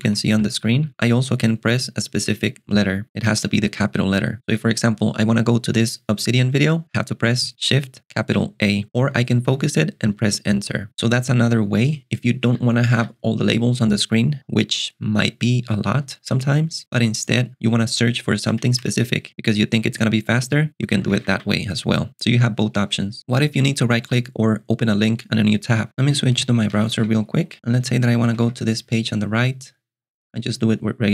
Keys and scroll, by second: 0.3 Tab, 12.5 alt+super+Delete, 13.0 alt+super+Delete, 18.6 alt+super+Delete, 18.9 alt+super+space, 20.6-21.9 typing, 28.3 shift+super+].